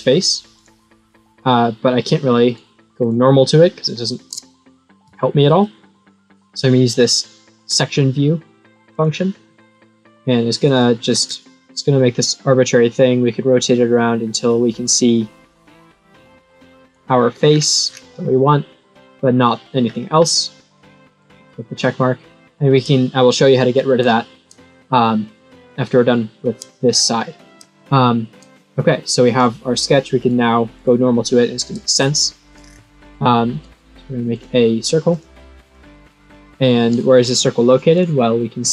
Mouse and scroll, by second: 0.5 click, 2.4 right click, 2.9 click, 5.0 middle click, 8.9 click, 9.4-10.7 middle drag, 11.2-12.0 scroll up 4, 12.0-12.6 scroll up 1, 12.6-16.8 drag, 17.5-17.9 scroll down 4, 18.2-19.2 middle drag, 19.8-20.3 scroll up 4, 21.1 click, 26.8-27.7 scroll down 6, 30.1 right click, 30.7 click, 32.6 scroll down 2, 34.3 click, 35.0 click, 35.6 click.